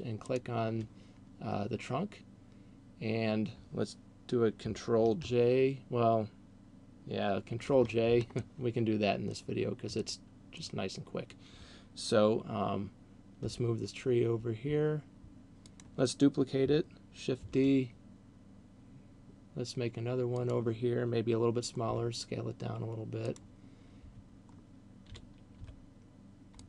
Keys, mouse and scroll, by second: 0.0 shift+right click, 7.5 ctrl+j, 8.3 middle click, 10.0 middle click, 13.5 g, 15.8 click, 17.5 shift+d, 20.5 click, 21.8 s, 23.5 click, 25.3 g.